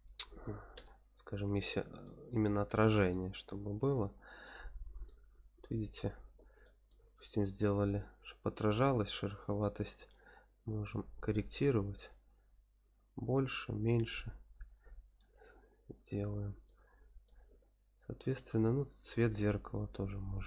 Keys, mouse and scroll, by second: 2.0-3.1 middle drag, 3.4 scroll down 2, 4.4-5.0 middle drag, 5.4-6.4 scroll up 3, 6.6-7.1 shift+middle drag, 7.8-8.8 middle drag, 9.4-11.0 drag, 11.3 click, 11.8 click, 13.2-14.3 drag, 15.5-15.8 scroll up 2, 16.6-17.3 middle drag, 18.2 click.